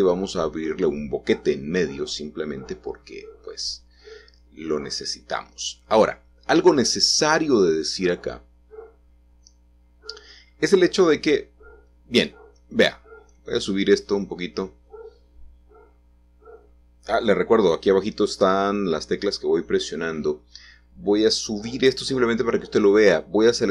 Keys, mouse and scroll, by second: 0.0-0.9 scroll down 1, 1.1 g, 1.6 z, 3.0-4.7 middle drag, 3.0-5.2 scroll down 1, 5.2-6.0 scroll up 2, 6.0-9.2 scroll down 5, 10.4-11.5 drag, 11.5 a, 12.4 g, 12.8 z, 15.9 ctrl+z, 16.5 ctrl+z, 17.1 ctrl+z, 18.8 a, 19.5 g, 20.0 z, 21.8 click.